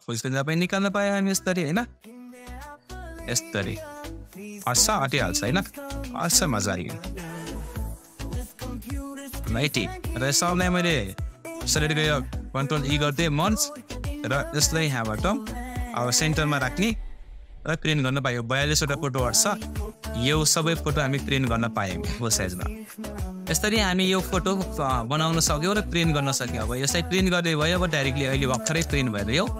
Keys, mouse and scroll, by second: 7.4 Up, 11.3 shift+click, 12.8 ctrl+e, 14.6-16.5 drag, 16.5 Up, 19.3 scroll up 1.